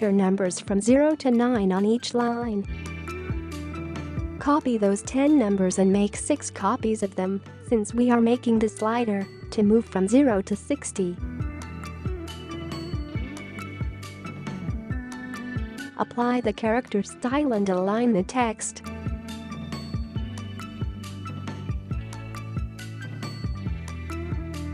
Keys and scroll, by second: 0.4-3.3 typing, 0.5 Return, 0.8 Return, 1.1 Return, 1.4 Return, 1.7 Return, 1.9 Return, 2.2 Return, 2.5 Return, 2.8 Return, 3.2 Return, 5.5 ctrl+c, 6.9 Return, 7.5 ctrl+v, 8.4 Return, 8.7 ctrl+v, 9.2 Return, 9.4 ctrl+v, 9.8 Return, 10.1 ctrl+v, 10.8 Return, 11.3 ctrl+v, 13.2 ctrl+a, 14.3 ctrl+c, 20.0-20.4 typing, 20.5 Return, 21.8 v.